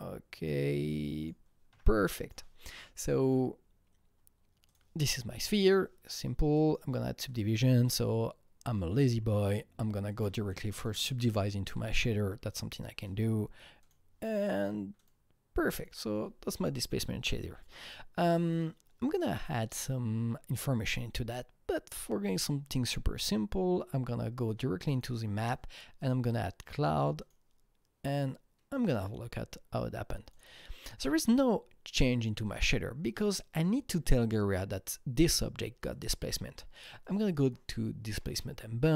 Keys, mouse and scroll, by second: 1.7 f, 2.0 alt+click, 2.3 f, 3.2 alt+click, 4.6 alt+click, 6.5 click, 7.2-10.0 drag, 10.0 click, 10.4 click, 10.8 click, 11.7 KP_3, 12.5 click, 13.8 click, 14.9 click, 15.7 click, 17.9 click, 19.7 click, 24.9 click, 26.0 click, 27.1 click, 30.3 click, 32.4-34.6 drag, 35.8 click, 37.0 click, 38.2 click.